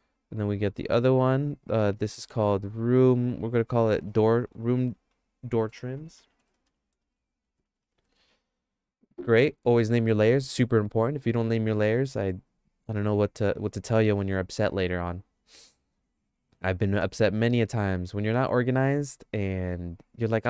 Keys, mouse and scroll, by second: 0.9 right click, 1.2 click, 2.0 click, 2.3-9.1 drag, 4.5 BackSpace, 4.7 BackSpace, 5.0 BackSpace, 6.5 o, 12.9 click.